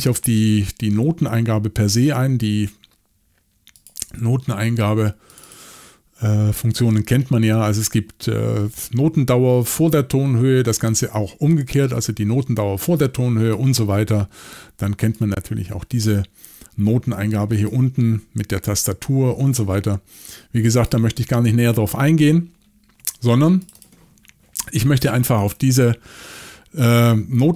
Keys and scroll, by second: 25.4 y.